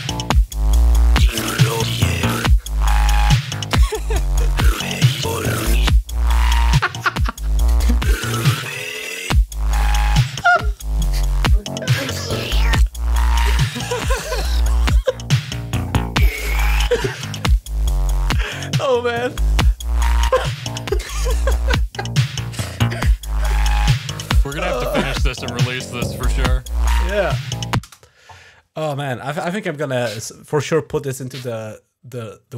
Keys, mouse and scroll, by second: 27.1 click, 27.7 space.